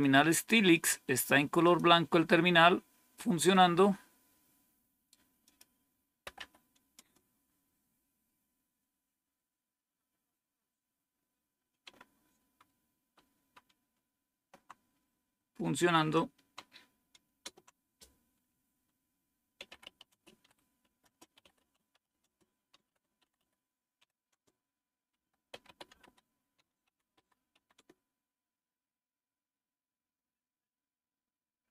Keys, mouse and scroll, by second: 5.3 click, 5.3 right click, 6.0-6.9 typing, 6.9 Return, 12.3 super+2, 12.8 super+3, 13.2 super+2, 13.6 super+1, 17.3 super+Return, 19.2-28.1 typing.